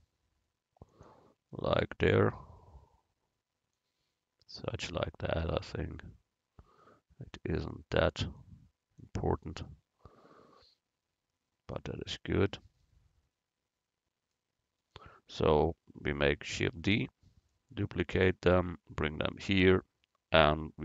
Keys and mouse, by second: 3.8-5.4 drag, 5.4 s, 8.5-10.3 drag, 9.5 right click, 16.8 shift+d, 17.6-19.1 drag, 19.4 click.